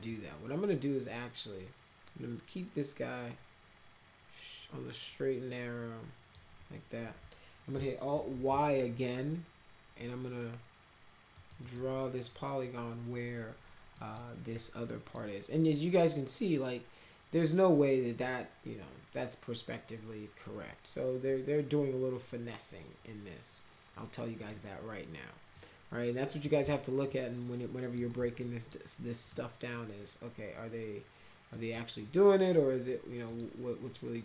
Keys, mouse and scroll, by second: 0.0-6.3 drag, 8.3 alt+y, 11.3 click, 11.5 right click, 13.9 middle click, 14.8 middle click, 24.3 click, 25.5-26.4 drag, 27.0 alt+click, 28.3 middle click, 29.3 middle click, 31.5 right click, 33.2 click.